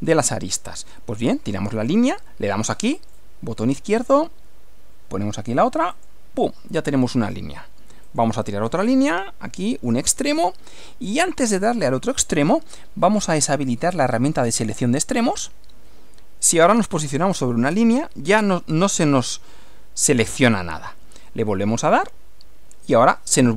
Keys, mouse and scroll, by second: 3.1 click, 6.0 click, 8.1 click, 10.0 click, 14.5 click, 22.0 click.